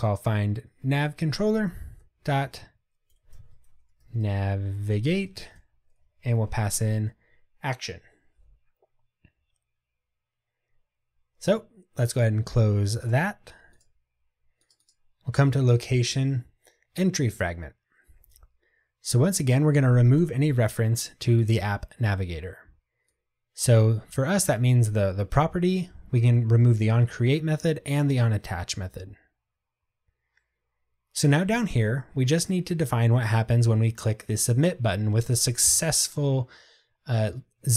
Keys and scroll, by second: 0.7 Tab.